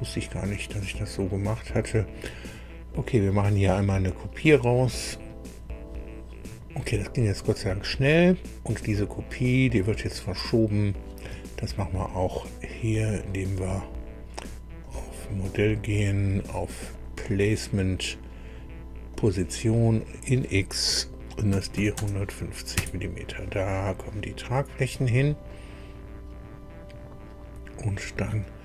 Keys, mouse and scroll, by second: 4.9 click, 6.6-7.0 scroll down 1, 7.5 click, 9.3 right click, 11.3 Escape, 14.8 click, 16.9 click, 19.1 click, 20.0 click, 21.5 KP_1, 21.7 KP_5, 21.9 KP_0, 22.7 KP_Enter, 25.5-28.4 drag.